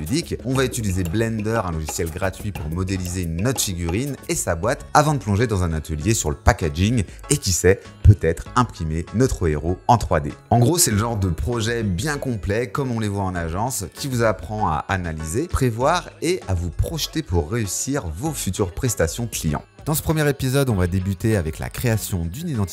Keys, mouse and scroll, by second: 0.0-0.4 typing, 0.5 middle click, 0.7 ctrl+z, 1.1 ctrl+alt+r, 1.2 middle click, 1.4 middle click, 2.1 middle click, 2.2-3.5 typing, 2.3 middle click, 2.6 middle click, 2.8 Tab, 3.0 middle click, 3.6 middle click, 3.7 Tab, 4.0 click, 4.4 middle click, 4.6 Tab.